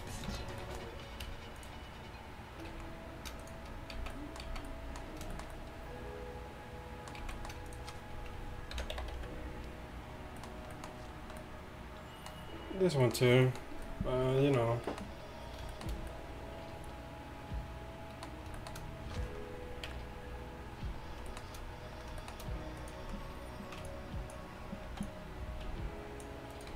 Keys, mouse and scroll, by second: 0.3 KP_5, 2.8 z, 4.0 z, 4.5 z, 7.3 z, 7.8 click, 8.8 ctrl+l, 9.2 a, 10.0 middle click, 19.9 KP_1, 22.9 middle click, 23.1 z, 24.9 z.